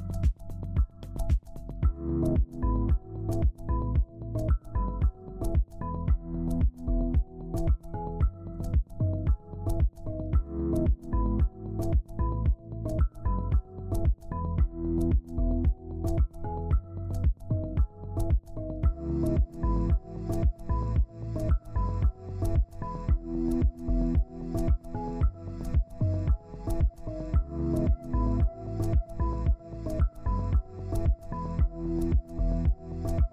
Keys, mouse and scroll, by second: 8.6 ctrl+q, 14.3 shift+click, 16.4 shift+click, 19.3 ctrl+space, 21.8 right click, 23.6 Down, 24.0 Down, 24.2 Down, 24.5 Down, 24.9 Down, 27.2 right click, 30.4 ctrl+alt+click, 31.7 ctrl+Page_Down.